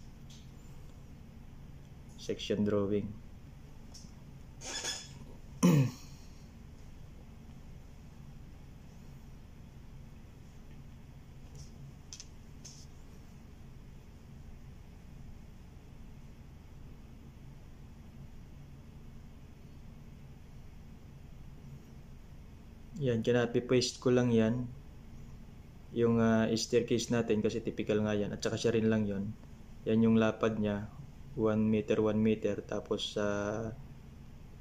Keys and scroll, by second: 4.3-6.9 typing, 8.0 c, 12.2-14.9 typing, 21.7 ctrl+c, 29.1 typing, 32.4 ctrl+c, 32.5 ctrl+v.